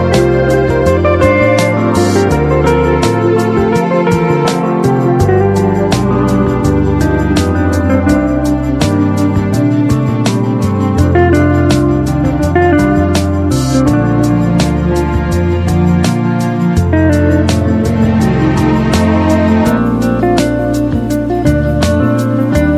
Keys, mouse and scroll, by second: 6.0-6.7 typing, 6.9-8.8 drag, 8.5-9.3 typing, 12.6-13.3 typing, 12.8 click, 15.0-15.7 typing, 16.8 click, 19.4 click, 22.3 alt+click.